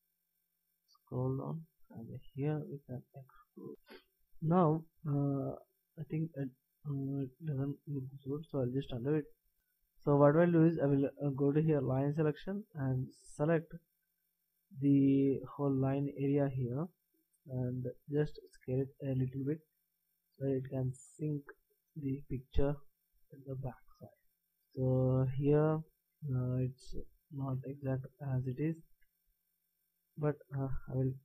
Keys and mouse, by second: 2.4 s, 9.1 ctrl+z, 9.5 ctrl+z, 12.2 click, 12.9-14.8 right drag, 15.1 b, 18.3 s, 23.6-26.1 middle drag, 26.1 b, 27.8 a, 29.1 b.